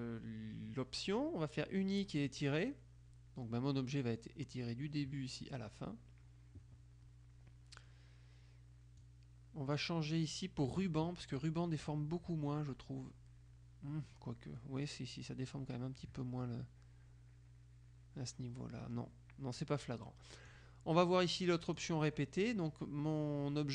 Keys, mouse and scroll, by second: 2.3 click, 9.1-11.2 drag, 15.4 click, 20.6-22.4 drag.